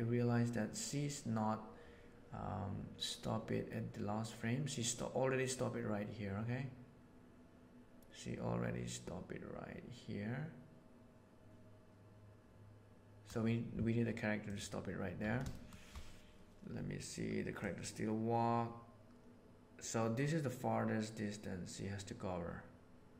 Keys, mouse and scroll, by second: 12.3 middle click, 14.5 middle click, 15.5 shift+middle drag, 17.6-19.4 middle drag, 22.4 right click.